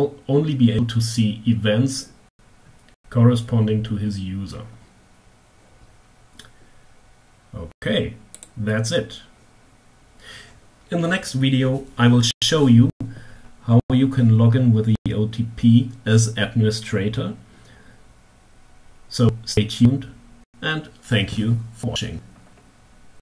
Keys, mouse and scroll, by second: 7.7 click.